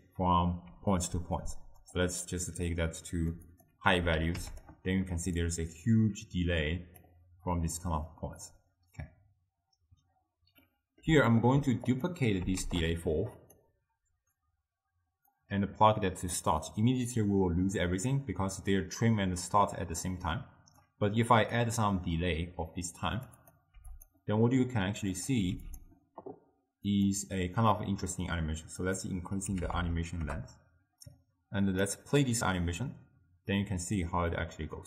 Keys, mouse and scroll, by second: 0.7 d, 1.3 d, 2.0 d, 2.1-4.7 drag, 5.5-10.7 drag, 10.7-12.0 middle drag, 12.0 click, 12.6 shift+d, 15.4-18.5 drag, 21.6-24.1 drag, 25.2 click, 27.0 click, 27.8-28.9 middle drag, 28.9 click, 29.8 0, 29.9 0, 31.7-34.8 drag.